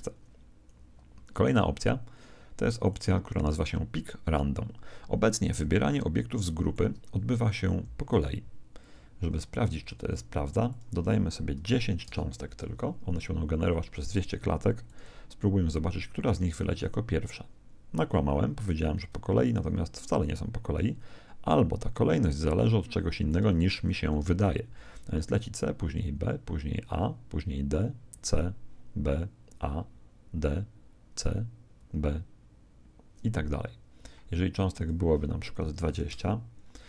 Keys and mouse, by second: 1.4 right click, 2.8 middle click, 2.9 click, 2.9 right click, 5.9-7.7 middle drag, 7.6 Escape, 8.1 right click, 9.8 middle click, 10.7 click, 14.9 click, 16.3 alt+a, 21.3 alt+a, 23.3 click, 24.3 alt+a, 33.4 Escape, 34.7 click.